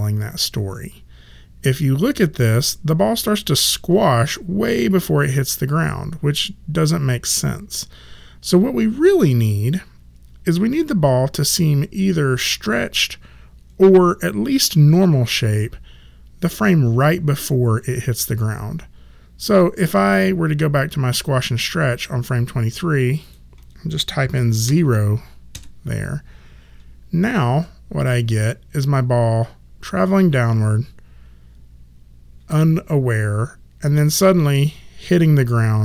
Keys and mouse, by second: 2.4 click, 19.4 click, 23.2 click, 24.6 KP_0, 25.5 Return, 25.5 KP_Enter, 28.0 click.